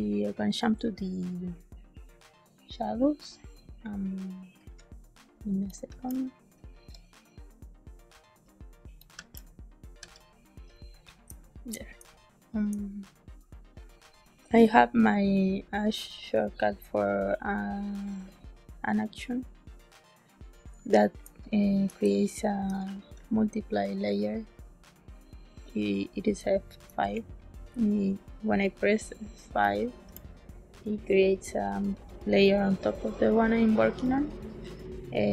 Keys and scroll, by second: 11.2 space, 11.9 space, 21.2 space, 21.9 space, 22.9 ctrl+s, 26.3 space.